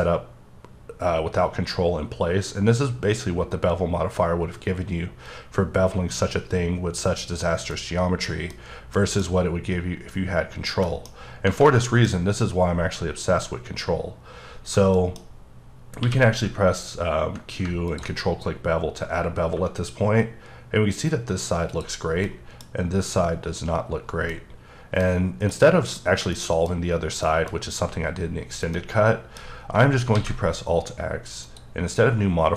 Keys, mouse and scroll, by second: 7.4-7.7 scroll down 1, 7.7 middle click, 8.4 scroll down 1, 8.6 scroll up 2, 8.9 middle click, 10.5-10.8 scroll down 2, 10.8 middle click, 11.2 scroll down 3, 11.4 scroll up 1, 11.7 middle click, 14.4 scroll down 1, 14.9 middle click, 15.4-16.0 scroll up 2, 16.0 q, 17.9 ctrl+click, 19.5 1, 21.7 click, 22.0 scroll down 2, 22.2 middle click, 22.6 scroll up 2, 24.0-24.3 scroll down 3, 24.3 middle click, 25.1 scroll up 1, 25.5 middle click, 26.4 middle click, 26.8 scroll up 1, 27.2 middle click, 27.7-28.0 scroll up 1, 28.2-28.7 scroll down 1, 28.7 middle click, 29.5-30.1 scroll down 3, 30.1 alt+x, 31.4 click.